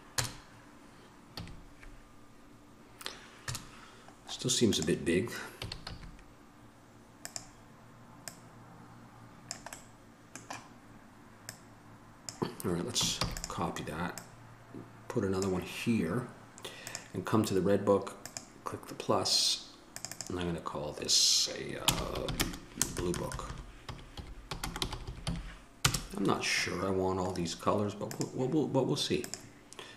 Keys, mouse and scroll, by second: 0.3 KP_0, 0.5 middle click, 1.6 a, 3.7 KP_0, 5.8 s, 10.0-11.1 drag, 11.1-13.4 middle drag, 13.4 shift+d, 18.5-23.2 drag, 23.2 BackSpace, 25.2 o.